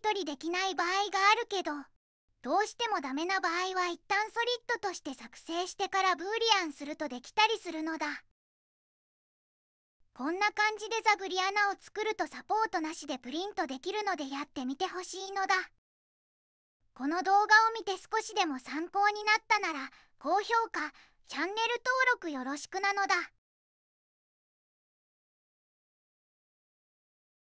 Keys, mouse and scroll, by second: 2.1 click, 2.7 middle click, 4.4 click, 6.1 middle click, 14.4 right click, 16.0 middle click, 16.9 right click, 20.0 middle click, 21.2 right click.